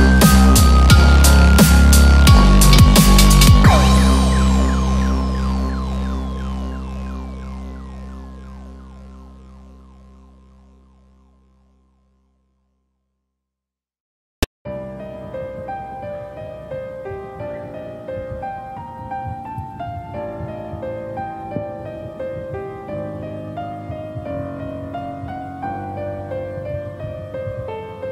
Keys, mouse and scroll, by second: 0.8 middle click, 0.8 click, 0.8 scroll down 2, 1.2 scroll down 3, 1.5 middle click, 2.1 click, 2.6 Tab, 2.7 click, 4.1 ctrl+2, 4.5 middle click, 5.0-5.5 scroll up 3, 5.5 middle click, 7.0 click, 7.2 click, 7.6 scroll down 2, 7.8 middle click, 10.0 scroll up 4, 10.2 middle click, 10.6-11.7 scroll down 4, 10.9 middle click, 11.5 middle click, 13.7 click, 14.0 middle click, 14.3-14.9 scroll up 4, 14.5 middle click, 14.9 shift+middle click, 15.4 scroll down 1, 15.8 click, 16.1 Tab, 16.5 click, 16.9 scroll down 2, 20.2 middle click, 20.7 i.